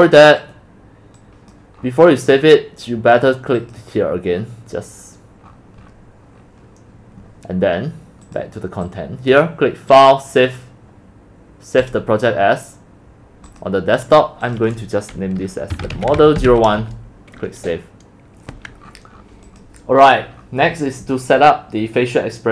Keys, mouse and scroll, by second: 1.9-3.8 scroll down 16, 3.8-5.5 drag, 5.5-5.9 scroll down 7, 6.1-7.6 middle drag, 7.6-8.4 scroll up 8, 8.4-13.5 drag, 14.6 click, 15.5-17.0 typing, 18.7 click, 20.0 middle click.